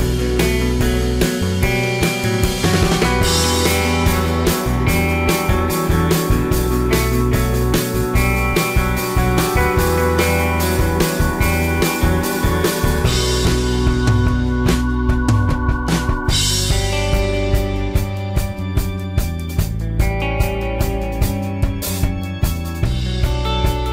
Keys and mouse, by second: 0.9 r, 2.2 click, 2.8 g, 5.9 g, 6.0-6.7 middle drag, 7.0-7.5 middle drag, 7.9 middle click, 8.1-8.7 middle drag, 9.2 g, 9.9-11.3 drag, 11.3-11.6 middle drag, 11.8-13.2 drag, 12.6 t, 13.2 middle click, 13.3-16.2 drag, 15.8 t, 16.2-16.5 middle drag, 16.5-16.9 drag, 17.4 y, 18.9-23.9 drag.